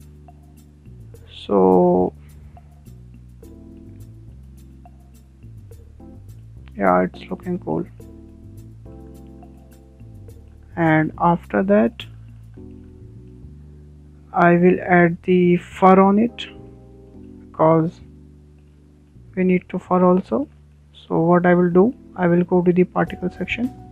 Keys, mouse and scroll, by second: 0.4-0.8 scroll down 8, 0.8-1.8 middle drag, 1.8 click, 2.2 middle click, 2.7 scroll up 6, 3.2-5.3 shift+middle drag, 5.3 scroll down 4, 5.6 middle click, 6.3 scroll up 3, 6.6-6.9 shift+middle drag, 6.9 scroll down 1, 7.0-7.8 middle drag, 7.8-8.2 scroll down 4, 8.2 shift+middle drag, 8.4 scroll up 1, 8.5-9.4 middle drag, 9.4 scroll down 2, 9.6-12.9 shift+middle drag, 12.9-13.4 scroll up 2, 13.4 shift+middle click, 13.5 scroll down 1, 13.7-15.6 middle drag, 15.6 scroll down 2, 15.8-16.3 shift+middle drag, 16.3-16.8 scroll up 6, 16.8 shift+middle click, 17.7 scroll down 2, 17.8 middle click, 18.7 scroll down 4, 19.1 shift+middle click, 19.7-20.2 scroll up 3, 20.2 scroll down 3, 20.5-22.8 middle drag, 22.8 click, 23.1-23.4 scroll up 2, 23.4-23.9 shift+middle drag.